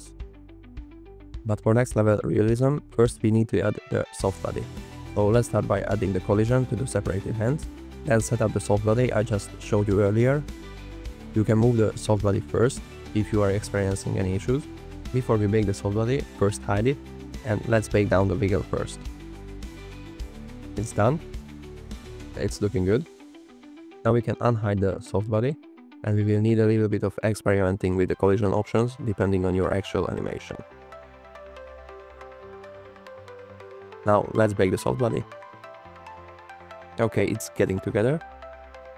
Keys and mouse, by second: 0.0 shift+drag, 2.7 click, 3.8 shift+click, 4.4 click, 6.1 click, 9.3 click, 11.7-13.4 drag, 14.9 click, 17.2 click, 18.0 n, 19.2 a, 26.0 click, 29.1 click, 29.9 click, 32.1 click, 32.9 click, 33.2 click.